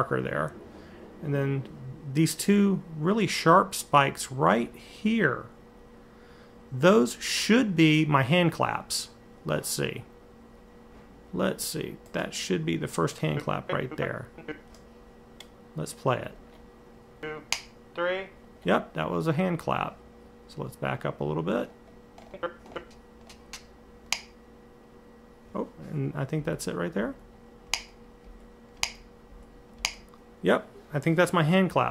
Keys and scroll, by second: 26.2 Left, 26.8 Right, 27.4 Right, 28.0 Left, 28.5 Right, 29.1 Left, 29.6 Right.